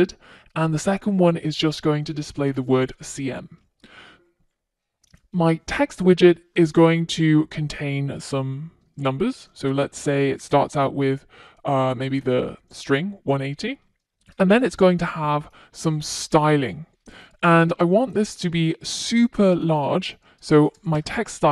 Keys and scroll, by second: 15.7 Return.